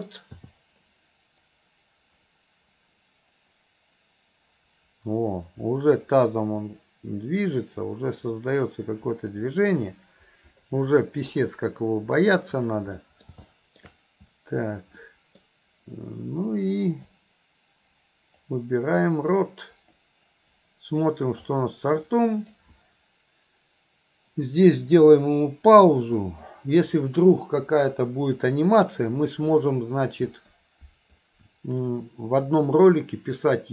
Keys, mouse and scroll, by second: 1.5-11.5 drag, 13.1 middle click, 13.5-13.9 middle drag, 15.1 middle click, 17.1-18.6 drag, 19.5-20.1 drag, 21.5-22.6 drag.